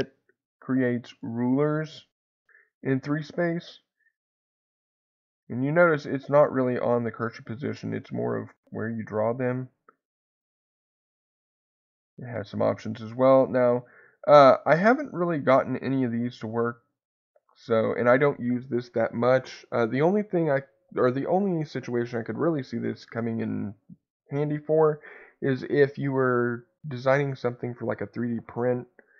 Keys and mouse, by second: 1.6-9.1 middle drag, 10.5 click, 12.4 click.